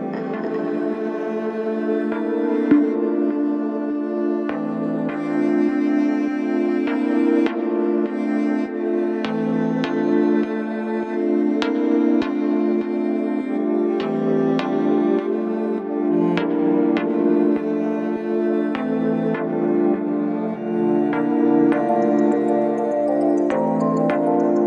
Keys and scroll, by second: 16.8 Delete, 21.3 3, 21.9 4.